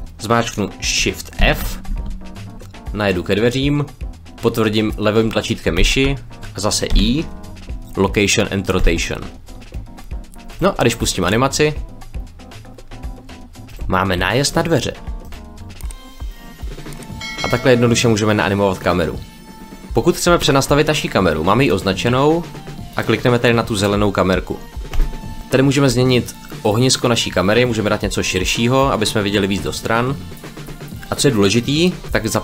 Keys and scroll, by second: 1.3 shift+f, 1.8 w, 7.5 i.